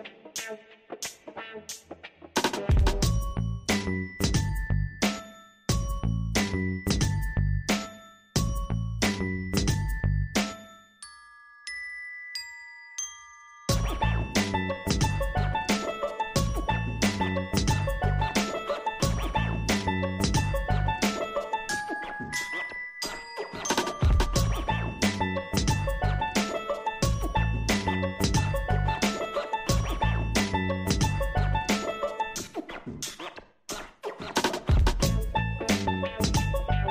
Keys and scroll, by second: 4.0 ctrl+t, 32.2 ctrl+t.